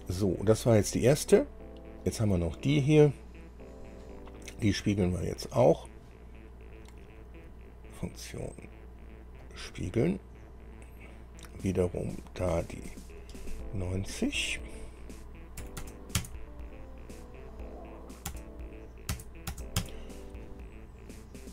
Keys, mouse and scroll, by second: 2.2 click, 9.6 click, 15.8 KP_9, 16.0 KP_0, 16.4 KP_Enter, 18.5 KP_0, 19.3 KP_Enter, 19.7 KP_0, 20.0 KP_Enter.